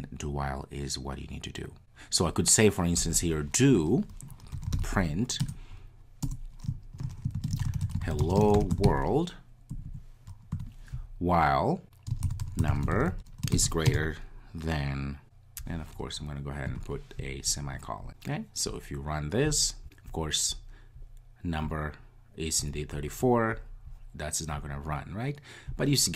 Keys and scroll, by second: 5.5 Return, 19.5 ctrl+r.